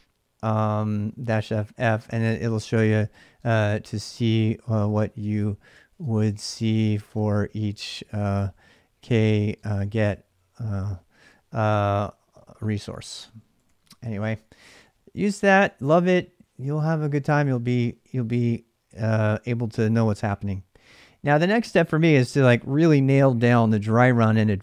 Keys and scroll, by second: 0.8-1.6 typing, 2.9-11.1 typing, 12.2-15.9 typing.